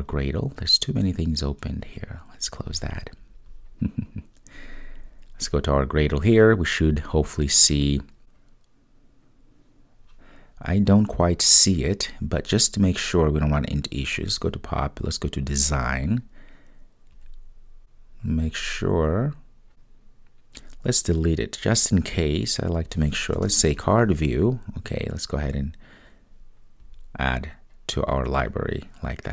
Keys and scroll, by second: 20.7 Delete.